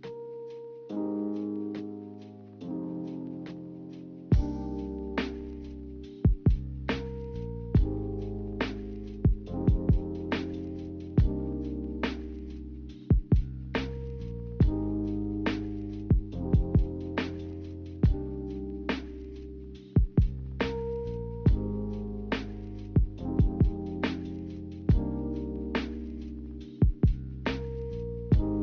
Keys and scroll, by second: 1.5 z, 12.1 c, 12.7 v.